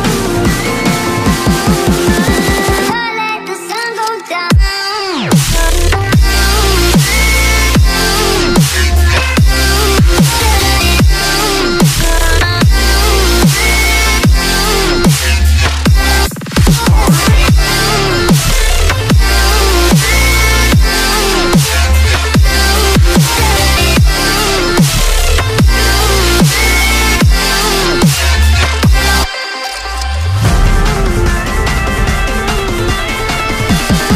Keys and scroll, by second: 4.2 5, 12.3 5, 32.9 Right.